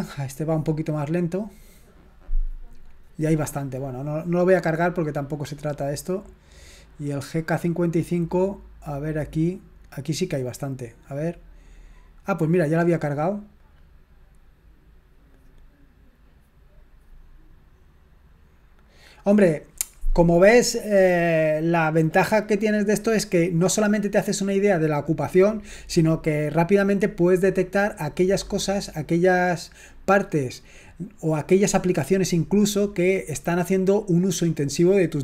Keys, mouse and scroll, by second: 4.6 click, 6.0 click, 11.0 click, 13.5 click.